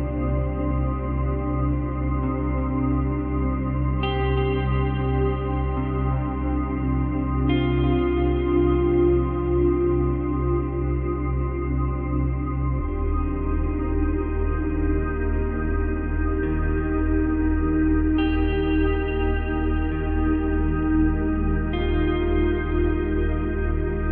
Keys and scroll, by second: 2.9 space, 3.6 space.